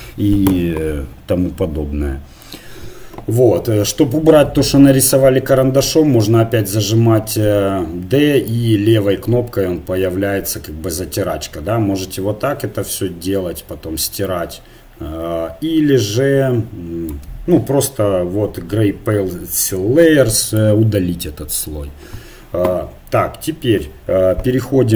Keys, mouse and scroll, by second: 4.2 click, 6.4-8.8 d, 17.1 d, 17.2 d, 20.6-22.5 drag, 23.6 middle click.